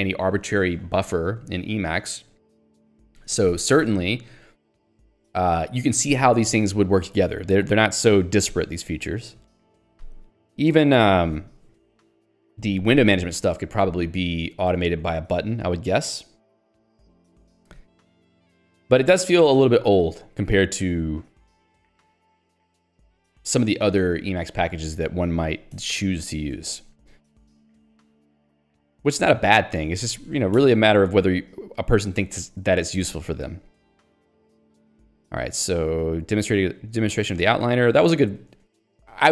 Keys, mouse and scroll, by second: 2.4 q, 3.1 ctrl+s, 3.3 Escape, 26.6 ctrl+d, 29.2 ctrl+alt+j, 29.8 ctrl+g, 30.0 Escape, 30.7 ctrl+b, 32.2 Return, 32.9 Escape, 33.7 j, 37.3-38.7 typing.